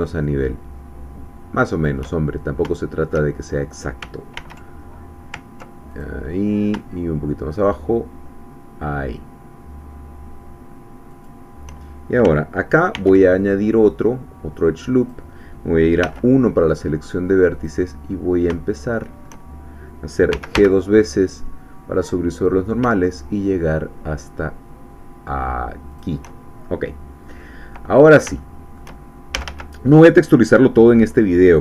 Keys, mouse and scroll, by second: 1.7 shift+click, 2.2-2.6 shift+scroll down 1, 2.7 shift+middle click, 3.4-3.7 shift+scroll up 2, 4.4 ctrl+r, 5.9 ctrl+click, 11.1 shift+click, 12.9 ctrl+r, 13.4 ctrl+click, 15.0 click, 16.1 1, 17.6 click, 18.1-18.4 scroll up 2, 18.7-19.8 shift+middle drag, 20.3 g, 25.9 shift+click, 26.4-27.2 shift+scroll down 2, 27.3 click, 28.0 scroll up 1, 28.4 shift+click, 28.6 shift+middle click, 29.3 shift+a.